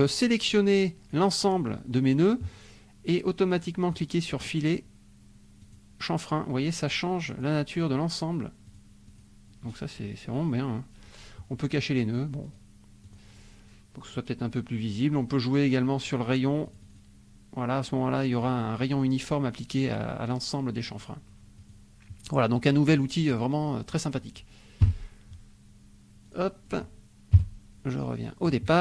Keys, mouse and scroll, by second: 0.0-1.3 drag, 4.0 click, 5.6 click, 6.8 click, 7.3 click, 8.6 click, 9.0 click, 12.4 click, 13.0 click, 16.0 click, 16.7-18.6 drag, 21.6 click, 22.9 click, 23.3 click, 23.9 click, 24.8 Delete, 26.2 click, 26.7 click, 27.3 KP_5.